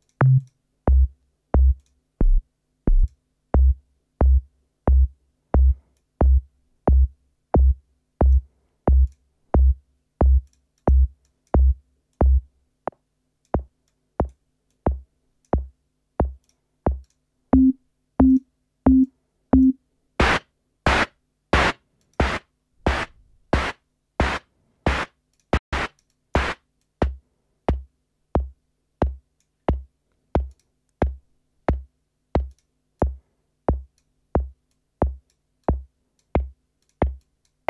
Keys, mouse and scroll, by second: 0.3 click, 1.7 click, 2.9 click, 5.8-8.4 drag, 8.9 click, 10.3 click, 10.7 click, 11.2 click, 12.1-13.6 drag, 13.8-14.5 drag, 14.7 click, 16.4 click, 17.0 click, 18.3 click, 19.0 click, 21.5 click, 22.0-22.3 drag, 23.6 click, 25.3 click, 25.6-26.5 drag, 26.7-29.5 drag, 30.4 click, 32.4 click, 32.9-34.1 drag, 34.6 click, 35.5-36.3 drag, 36.7 click, 37.1-37.6 drag.